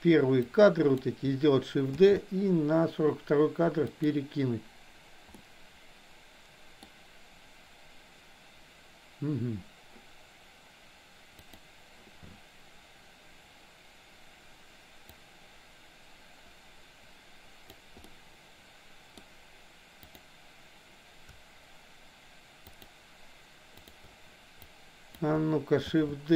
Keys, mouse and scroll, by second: 0.5-1.2 drag, 2.0 shift+d, 5.4-6.9 middle drag, 11.4 click, 15.3-17.8 drag, 18.0-19.3 middle drag, 20.0 click, 23.9 shift+click, 24.7-25.4 drag, 25.9 shift+d.